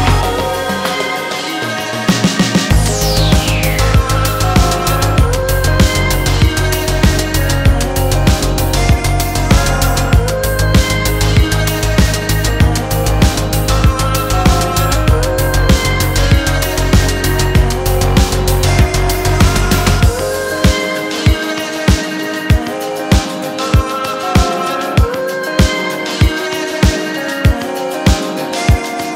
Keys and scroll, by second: 15.8 1, 20.1 Up.